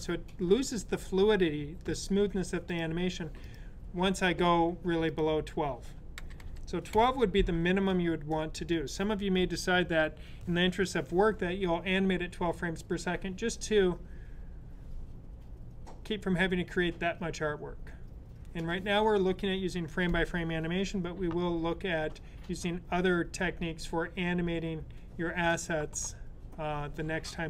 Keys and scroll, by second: 5.8-6.8 typing.